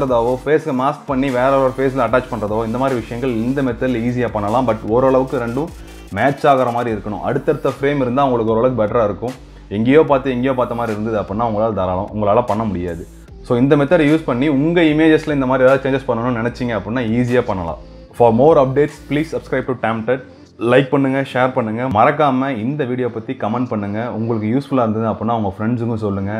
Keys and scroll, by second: 7.4 ctrl+0.